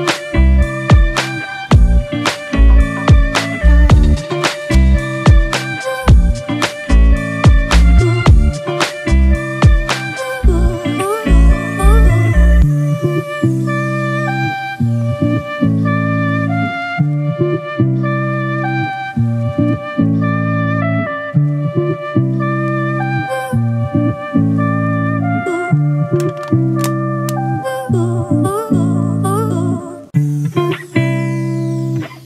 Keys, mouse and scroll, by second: 3.7 right click, 5.3-6.2 typing, 17.3 alt+right click, 21.0 Down, 21.2 Down, 21.4 Down, 21.5 Down, 22.3-24.8 scroll up 2.